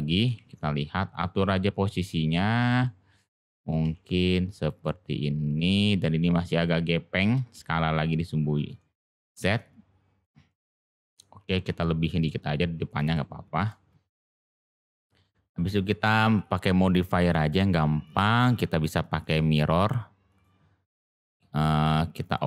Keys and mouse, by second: 0.1 g, 1.3 s, 2.8-3.7 middle drag, 3.8 g, 4.8-5.6 middle drag, 6.0-6.5 middle drag, 8.7-9.1 middle drag, 9.3 g, 10.4-10.8 middle drag, 13.1-13.7 middle drag, 14.6-15.0 middle drag, 18.0 click, 18.6-20.4 drag, 21.8-22.4 drag.